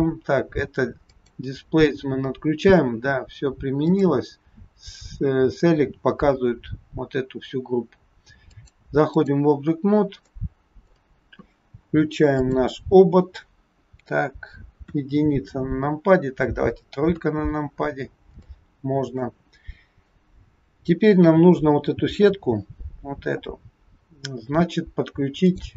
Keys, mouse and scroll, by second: 1.0 click, 3.9 click, 6.3-6.9 scroll down 2, 8.5 click, 10.3 middle click, 12.4 click, 14.9 KP_1, 17.0 KP_3, 17.8-18.3 scroll down 2, 18.4 shift+middle click, 25.4 click.